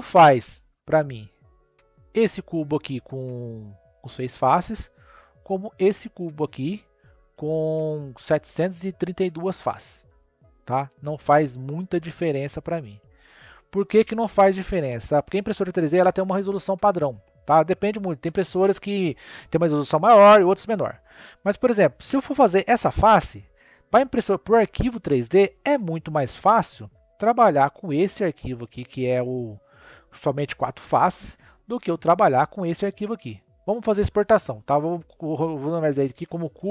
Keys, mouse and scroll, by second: 0.0 click, 1.1 click, 1.9 click, 4.3 Tab, 5.1 click, 8.0 Tab, 10.4 click, 11.1 click, 11.7 click, 12.7 Tab, 14.3 click, 24.6 click, 25.5 click, 26.2 click, 29.1-31.6 middle drag, 31.6 click, 34.3 click, 35.5 click, 35.7-36.7 drag.